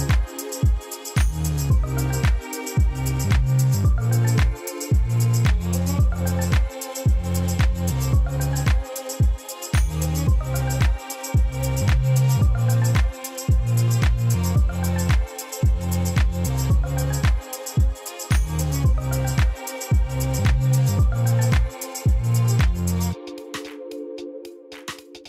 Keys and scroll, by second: 0.7 m, 2.9 shift+d, 3.1 shift+z, 4.2 g, 4.3 z, 4.9 r, 6.1 r, 10.4 m, 12.6 shift+d, 12.8 shift+z, 13.9 g, 14.0 z, 14.4 r, 16.5 g, 16.6 z.